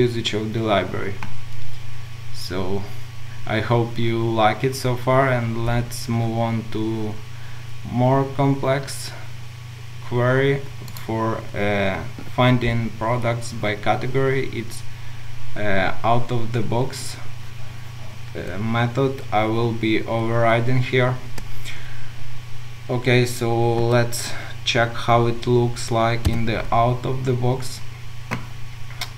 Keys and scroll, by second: 26.3 ctrl+u.